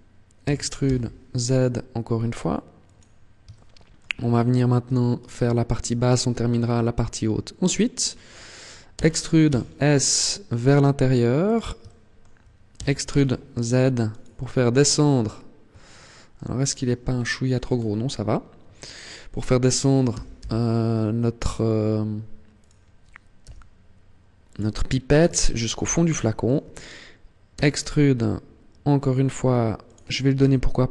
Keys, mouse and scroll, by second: 0.3 e, 2.7 click, 3.3 shift+middle click, 5.0 alt+right click, 8.7 e, 11.2 click, 11.6 shift+middle click, 12.5 e, 14.0 click, 14.6-15.4 scroll down 7, 15.8 shift+middle click, 16.4-16.8 scroll down 2, 16.9-17.6 scroll up 6, 19.8 g, 22.4 click, 23.2 g, 24.4 click, 24.6 scroll down 1, 25.2 shift+middle click, 27.3 e, 29.7 click, 30.2 r.